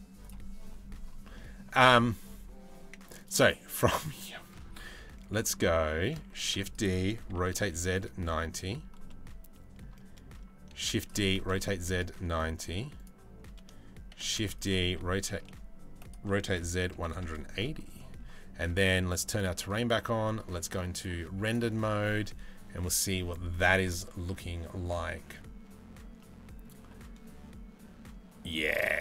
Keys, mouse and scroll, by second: 1.0 middle click, 2.8 middle click, 5.9 shift+d, 6.9 r, 8.7 middle click, 10.4 shift+d, 10.9 r, 12.6 click, 13.8 shift+d, 14.4 r, 15.9 r, 17.6 middle drag, 18.9 click, 23.2 right click, 25.8-26.2 middle drag, 28.9-29.0 middle drag.